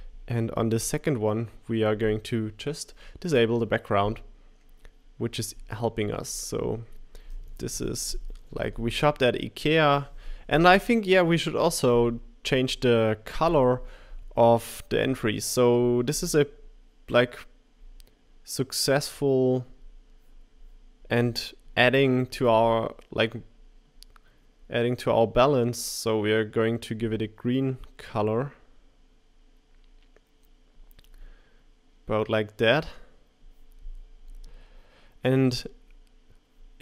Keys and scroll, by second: 8.1 typing, 9.7 typing.